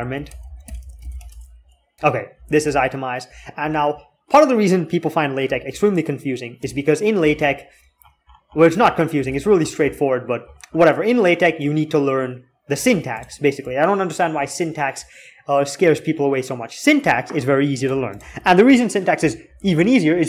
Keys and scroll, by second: 0.0-2.9 typing, 5.4 alt+8, 6.4 alt+3, 6.9 alt+3, 9.1 alt+x, 19.0 alt+z.